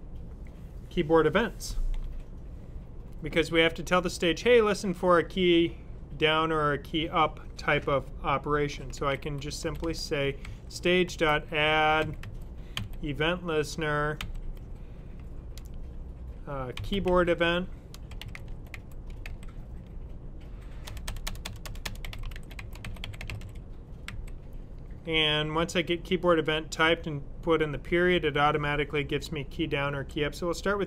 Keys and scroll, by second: 8.3-9.3 typing, 10.4-12.6 typing, 14.1 typing, 16.4-19.1 typing, 20.7-23.9 typing, 26.9 typing, 29.7 Down.